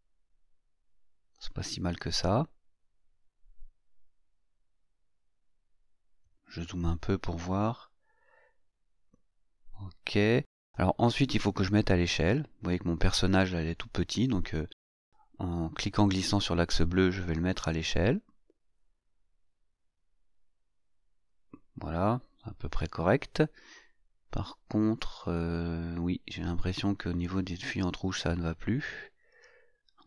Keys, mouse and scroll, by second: 4.3-5.2 scroll up 1, 5.6-6.7 scroll up 3, 8.5-10.7 scroll down 3, 10.9-12.7 shift+middle drag, 12.7-13.8 shift+scroll up 1, 13.8-14.6 scroll up 1, 14.6 scroll up 1, 15.3-21.7 drag, 26.4 click.